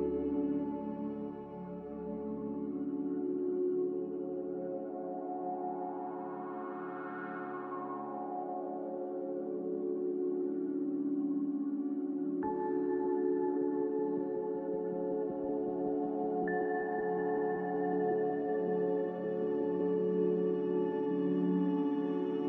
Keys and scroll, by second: 3.7 a, 8.6 q, 14.1-15.9 typing, 19.0 z, 20.2 s.